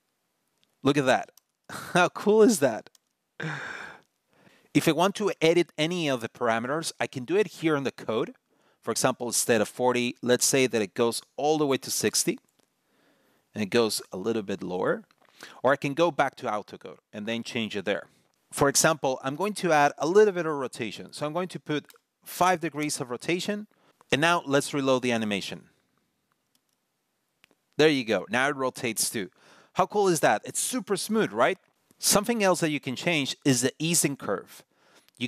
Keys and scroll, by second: 0.4 super+r, 2.3 super+r, 2.6 super+r, 26.2 super+r.